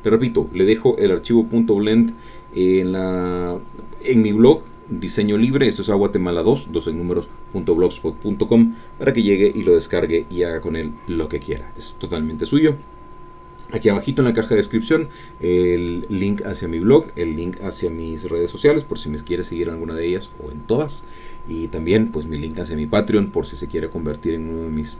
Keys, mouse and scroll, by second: 0.0 middle click.